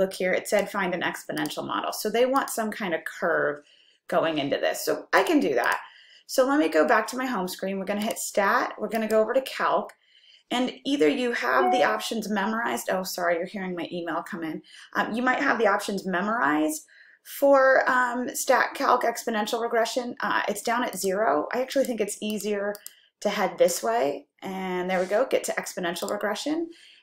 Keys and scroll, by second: 9.1 Right, 21.0 Up, 22.0 Up, 26.1 Return, 26.1 Up.